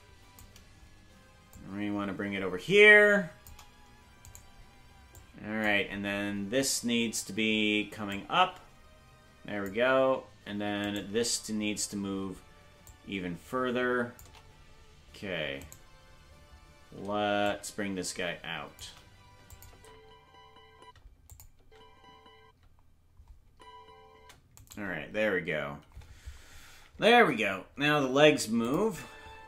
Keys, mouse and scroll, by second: 1.5-3.5 shift+drag, 4.4 right click, 5.2 click, 8.1-9.7 drag, 11.0 right click, 12.9-14.2 shift+drag, 15.8 right click, 17.4-18.8 shift+drag, 19.5 click, 19.7 space, 21.3 click, 21.6 space, 24.7 right click, 26.4-26.9 scroll up 1, 27.3-28.7 scroll down 1, 28.7 click, 28.8 space.